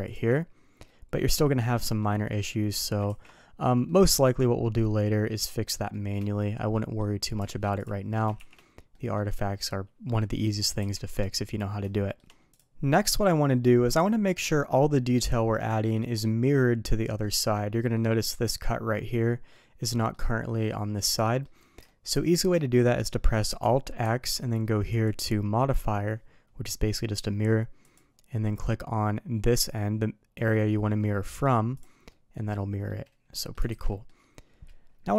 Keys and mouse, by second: 0.8 middle click, 1.7 middle drag, 2.4 middle drag, 3.0 ctrl+z, 3.8 middle click, 4.7 middle click, 5.4 shift+middle drag, 5.8 shift+middle drag, 6.7 middle click, 8.3 shift+2, 8.8 middle drag, 11.8 middle drag, 12.5 click, 13.1-15.9 middle drag, 17.2-17.5 middle drag, 17.9 middle click, 19.1-19.5 middle drag, 19.9 middle click, 21.2 middle drag, 21.9-22.3 shift+middle drag, 24.0 alt+x, 24.9-28.1 drag, 31.8 click, 32.1 middle drag, 32.9-33.5 middle drag, 33.7 alt+a, 33.9 middle drag.